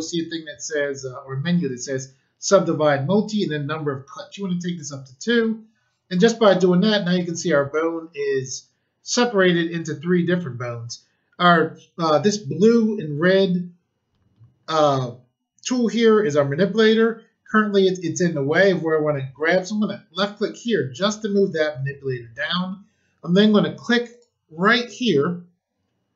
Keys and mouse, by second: 4.7 click, 20.1 click, 24.0 click.